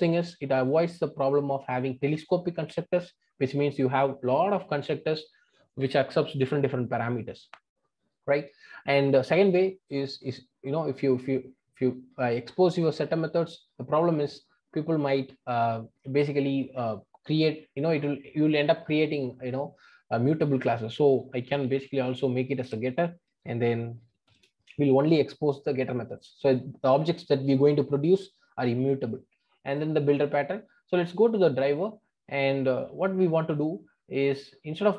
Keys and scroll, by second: 22.6 Return, 24.2 ctrl+alt+o.